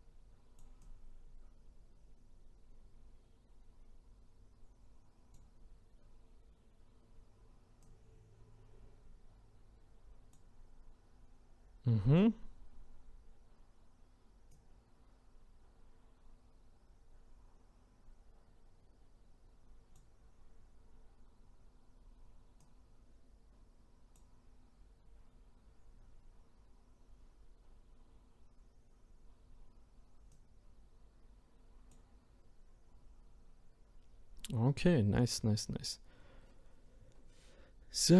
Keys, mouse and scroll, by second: 0.8-3.8 drag, 7.8-10.8 drag, 14.5-17.5 drag, 22.6-25.8 drag, 30.3-33.5 drag.